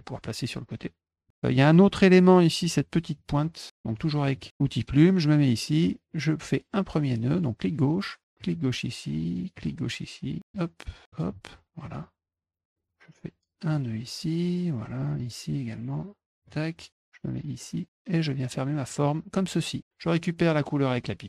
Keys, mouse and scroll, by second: 0.2-1.2 drag, 3.8 click, 4.2 middle click, 4.4 middle click, 7.2 click, 8.4 click, 9.5 click, 10.4 click, 11.1 click, 13.6 click, 15.1 click, 16.4 click, 18.8 click.